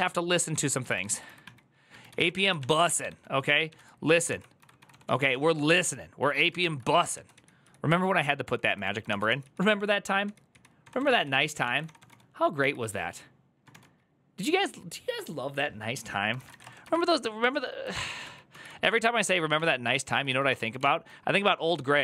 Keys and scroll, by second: 0.0-12.4 typing, 0.3 ctrl+d, 4.1 ctrl+c, 6.4 ctrl+v, 13.5 typing, 15.9-16.8 typing, 17.7 ctrl+o, 18.0 ctrl+o, 18.3 ctrl+i, 19.7-21.0 typing, 21.1 ctrl+i, 21.4 ctrl+i.